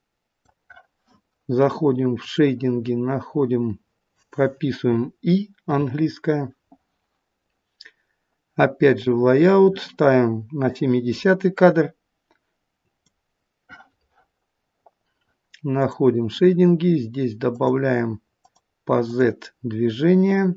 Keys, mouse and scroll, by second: 9.2 click, 10.7 click.